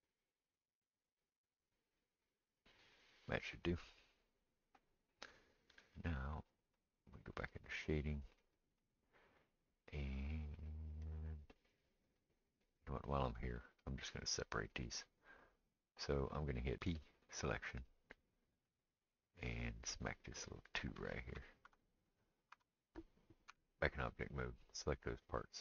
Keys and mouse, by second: 0.4-7.0 drag, 7.0-18.7 middle drag, 8.8 click, 16.8 p, 18.7 click, 18.8-24.1 middle drag, 22.1 click, 23.5 Tab, 24.1 click, 24.2-25.6 middle drag.